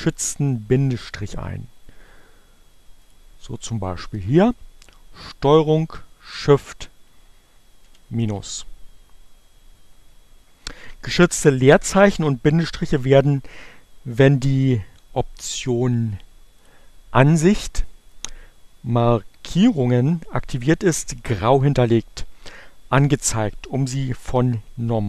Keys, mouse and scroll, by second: 2.9 click, 5.7 ctrl+shift+-, 16.3 click.